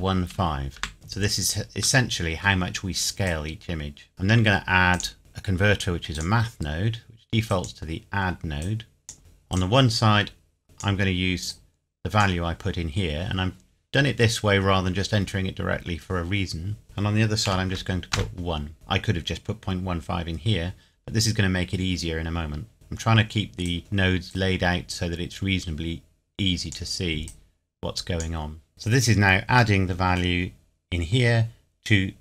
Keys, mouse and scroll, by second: 0.3 KP_5, 0.7 KP_Enter, 2.0 middle click, 3.3 click, 4.9 click, 6.1 click, 8.0-8.6 scroll down 1, 8.6 click, 9.2-9.5 scroll up 1, 9.5 click, 16.8 click, 17.5 KP_1, 18.1 KP_Enter, 18.7 click, 22.7 scroll down 1, 22.8 scroll up 1, 23.6 click, 28.7-29.8 scroll down 1, 29.8 middle click.